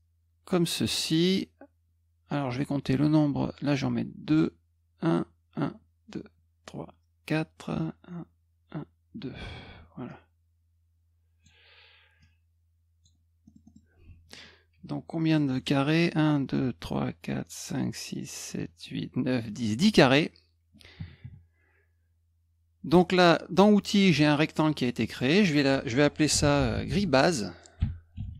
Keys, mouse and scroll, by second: 10.0-11.4 drag, 12.2 click, 13.4 middle click, 13.6 middle click, 15.2 click, 22.9 click, 25.0 click, 25.1 click, 26.0-28.3 typing.